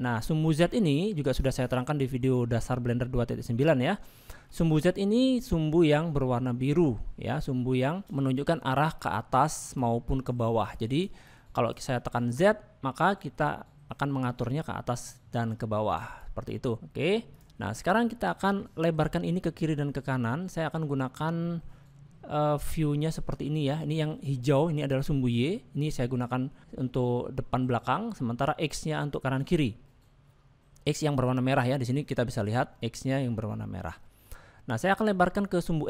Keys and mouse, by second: 0.7 shift+middle click, 4.3 shift+middle click, 8.0 click, 9.0 click, 10.0 click, 10.7 click, 11.3 click, 12.3 click, 16.2 ctrl+click, 17.4 click, 17.9 middle click, 18.8 middle click, 21.6-23.8 middle drag, 26.0 middle click, 28.3 middle click, 34.0 middle click.